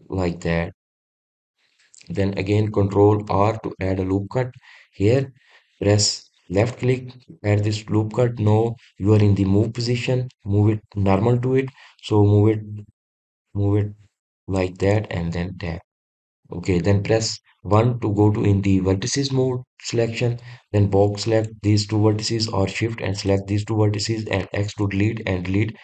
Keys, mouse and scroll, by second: 2.2 click, 4.0 ctrl+r, 15.6 click, 16.3-18.5 scroll up 1, 18.5 1, 21.4 click, 23.9 shift+click, 25.2 x.